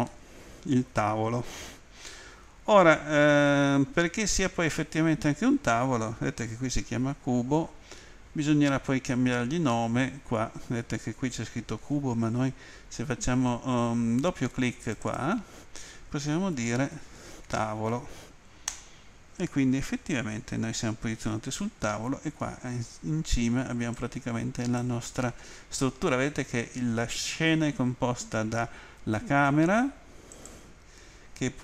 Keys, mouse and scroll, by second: 0.1 middle click, 1.5 middle click, 2.3 middle click, 14.8 click, 15.0 click, 15.1 double click, 18.7 Return, 18.7 typing, 23.9 click, 30.3 click.